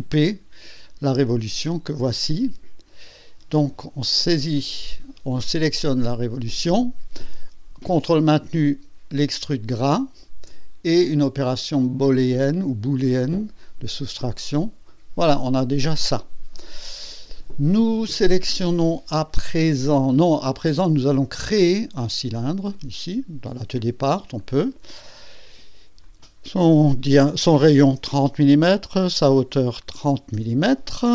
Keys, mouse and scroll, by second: 0.8 click, 1.3 space, 4.5 click, 6.1 click, 9.7 ctrl+click, 13.6 click, 22.3 click, 24.4 click, 26.0 click, 27.5 KP_3, 27.8 KP_0, 29.3 click, 30.0 KP_3, 30.3 KP_0.